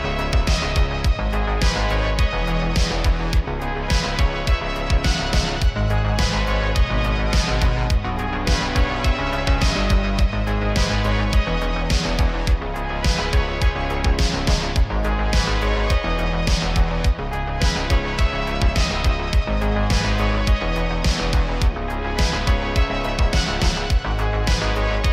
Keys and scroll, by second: 0.9 shift+d, 1.2 t, 2.7 z, 4.4 s, 4.8 g, 5.8 g, 9.3 shift+d, 9.9 z, 10.6 s, 13.0 g, 14.3 r, 14.5 r.